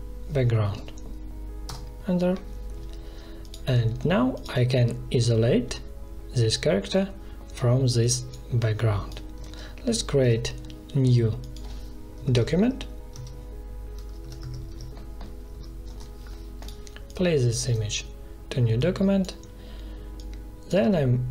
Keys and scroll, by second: 0.0-0.2 typing, 1.6 Return, 9.3 ctrl+z, 10.1 ctrl+n, 11.8-12.7 typing, 13.0 Tab, 14.1-15.0 typing, 15.8 Return.